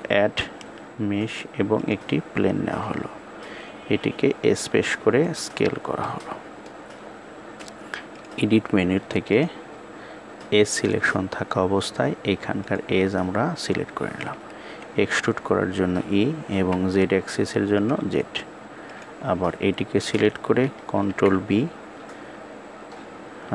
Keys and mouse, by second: 4.5 s, 5.7-6.4 middle drag, 7.9-9.1 drag, 12.2 click, 18.5 click, 20.8 ctrl+b.